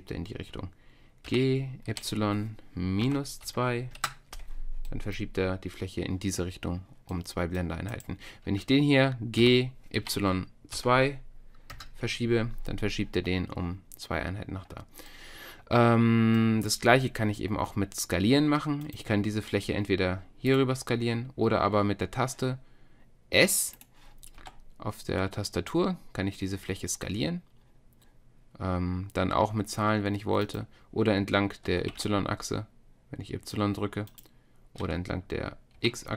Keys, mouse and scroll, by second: 1.3 g, 7.9-9.4 middle drag, 9.4 g, 15.1-20.5 drag, 20.5-22.2 middle drag, 22.2 click, 23.8-25.5 drag, 24.4 s, 31.7 s, 34.8 s.